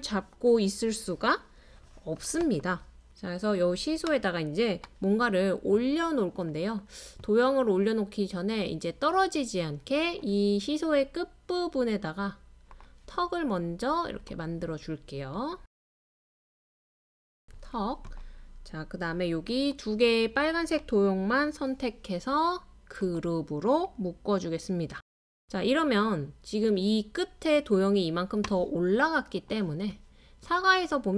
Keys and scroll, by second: 4.3-5.1 typing, 6.3-7.1 typing.